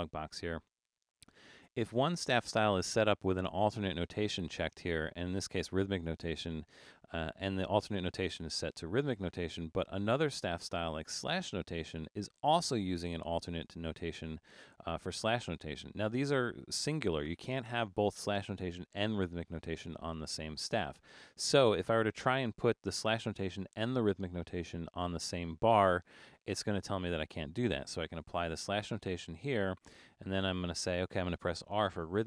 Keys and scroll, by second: 28.6 shift+s.